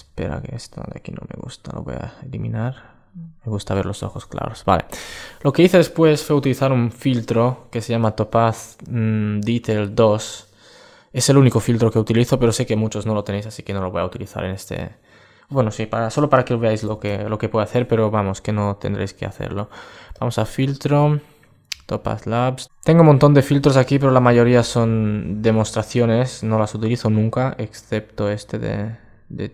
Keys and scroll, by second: 16.6 alt+shift+super+e.